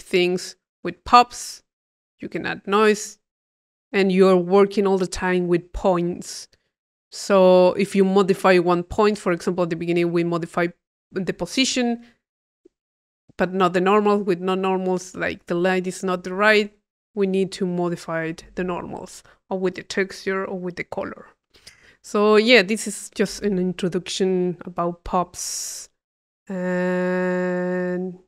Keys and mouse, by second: 13.9 click, 17.4 click, 19.8 click, 20.3 click, 21.0-22.1 drag, 22.8 click, 23.5 middle click, 24.3-26.3 drag, 26.9-28.2 drag.